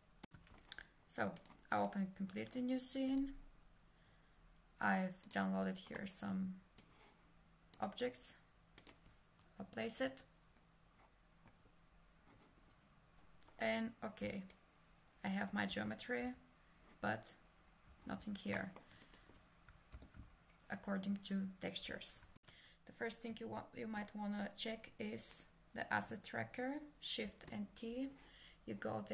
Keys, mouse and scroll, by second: 1.4 click, 1.8 click, 2.7 click, 5.3 click, 8.8 click, 14.2 s, 14.5 click, 15.7 w, 16.2 F4, 18.6 middle click, 19.0 click, 20.0 ctrl+space, 27.2 shift+t.